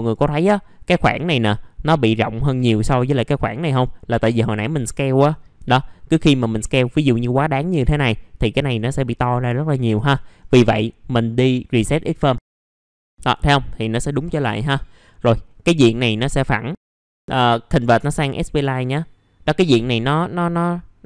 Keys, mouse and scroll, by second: 4.8 middle click, 6.3 click, 7.0 middle click, 7.2-7.5 scroll down 1, 10.2-10.6 scroll up 1, 10.6 middle click, 12.4 click, 14.4 middle click, 14.7 scroll down 1, 15.5-16.5 scroll up 1, 17.2 right click, 18.6 click.